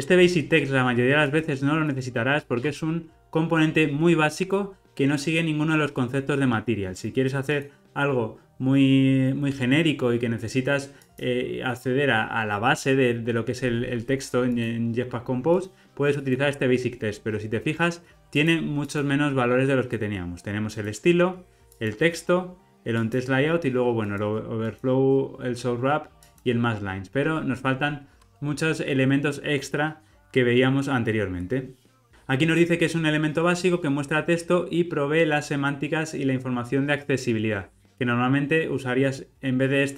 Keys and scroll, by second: 32.1 alt+super+[.